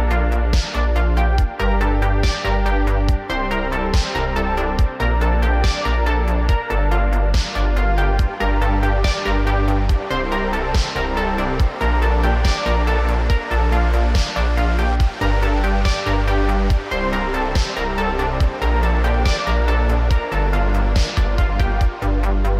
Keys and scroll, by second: 7.6 space, 13.2 space, 15.1 space, 16.1 r, 16.3 x, 16.5 x.